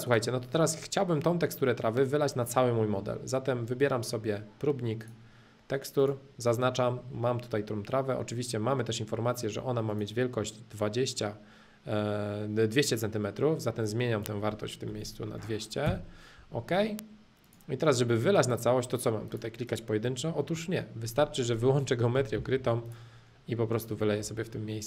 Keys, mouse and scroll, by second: 0.0 click, 0.4-3.1 middle drag, 5.0-7.0 drag, 9.9-11.9 drag, 13.8-15.8 drag, 17.4-19.4 drag, 19.7 click, 20.0-22.0 middle drag, 22.5 h, 22.8-24.0 drag, 24.0 middle click, 24.2 space, 24.5-24.8 middle drag.